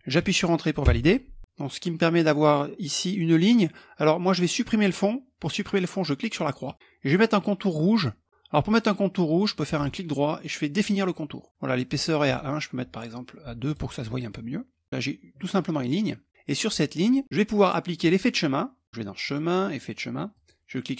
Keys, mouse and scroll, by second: 0.4 Return, 6.2 click, 9.7 right click, 10.3 click, 11.9 right click, 13.2 click, 15.1-16.3 drag, 17.5 click, 18.8 click, 19.9 click.